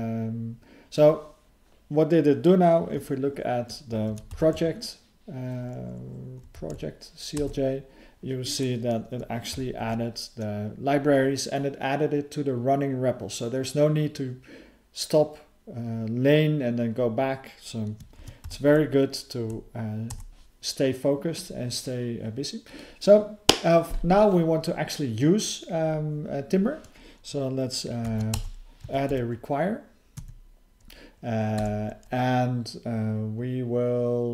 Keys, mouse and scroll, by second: 22.7 click, 22.8 click, 30.2 Tab.